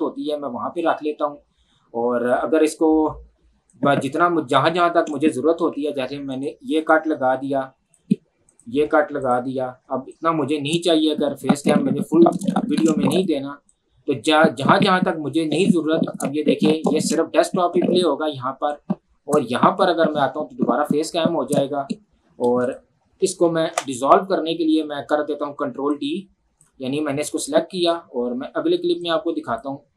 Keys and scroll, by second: 6.3 c, 9.8 v, 9.9 Delete.